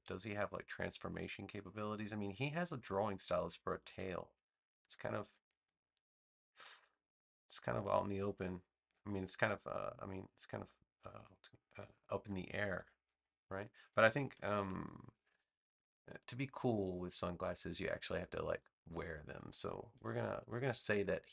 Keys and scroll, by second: 14.4 super+-, 16.0 space.